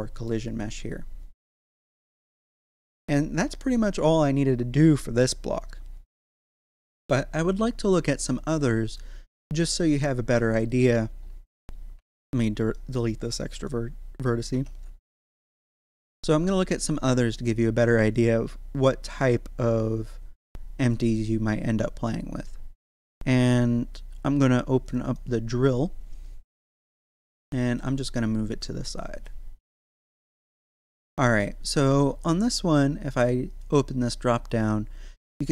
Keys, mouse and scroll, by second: 0.5 right click, 2.1 1, 2.6-4.4 scroll down 1, 5.8-7.1 scroll down 1, 8.2-10.7 middle drag, 10.7 right click, 11.2 scroll up 1, 11.9 Tab, 12.6 right click, 13.2 x, 13.6 click, 14.5 Tab, 14.8 scroll down 1, 17.2 click, 20.8 click, 24.8 click, 26.0-27.5 scroll down 1, 27.5 g, 27.7 x, 29.2 click, 29.7-33.5 shift+middle drag, 33.5 click, 35.1-35.5 scroll down 1.